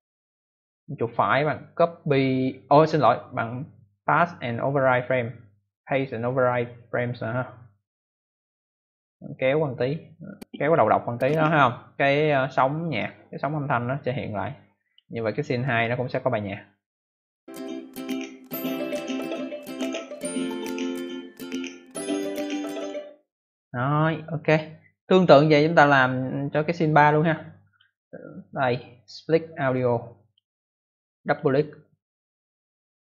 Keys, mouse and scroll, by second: 0.8 right click, 7.7 click, 9.3 click, 10.6 click, 13.7 click, 15.3 click, 17.1 click, 22.7 click, 23.5 click, 28.6 click, 28.9 right click, 29.0 double right click, 30.2 click, 30.7 click, 31.2 click, 31.4 click, 32.7 right click.